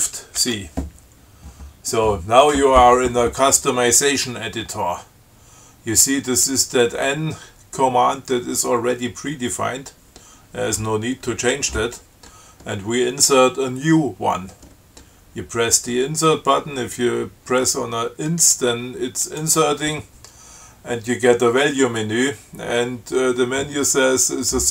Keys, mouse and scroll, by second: 0.6 shift+c, 19.5 click.